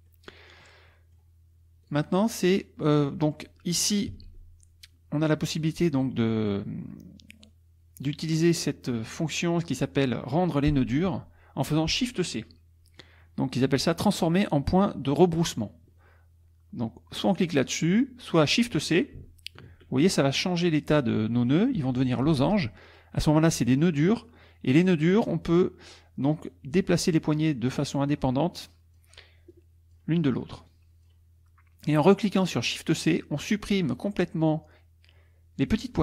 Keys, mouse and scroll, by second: 0.1 middle click, 0.9 middle click, 0.9 click, 1.8 click, 3.1 click, 4.1 ctrl+a, 6.0 click, 15.1 click, 22.3 shift+c, 23.6 click, 25.3 click, 26.2-29.2 drag, 29.5 click, 30.7 click.